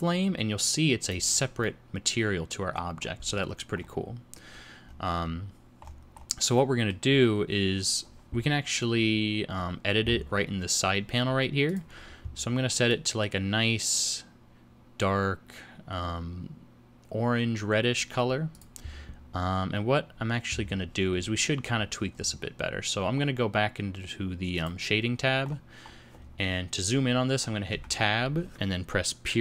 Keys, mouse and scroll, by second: 1.8 middle click, 3.3-3.9 scroll down 6, 3.8 scroll up 4, 4.6-5.8 scroll down 5, 5.8-6.8 scroll up 7, 6.6 middle click, 7.2 scroll up 1, 10.5-11.8 scroll down 1, 11.8 click, 11.8-12.8 scroll down 3, 18.6 click, 22.2-23.4 scroll down 5.